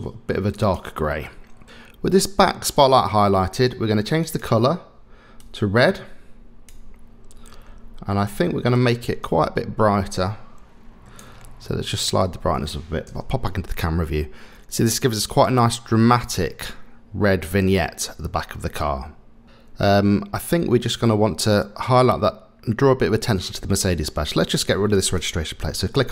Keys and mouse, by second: 4.4 click, 8.8-11.2 drag, 13.1 KP_0, 24.9 click.